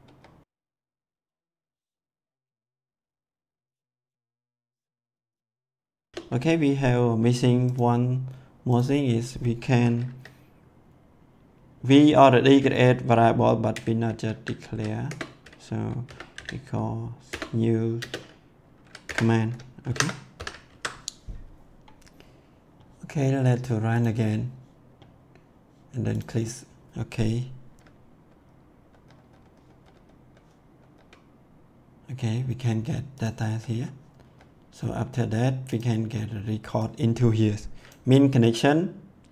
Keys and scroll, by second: 6.1 BackSpace, 13.7 v, 14.2 c, 15.0 Return, 16.0 =, 16.3 n, 17.2 Return, 17.9 space, 19.0 Return, 19.8 shift+0, 20.3 ;, 20.6 ctrl+s, 28.2 F10, 29.5 F10, 33.4 F10.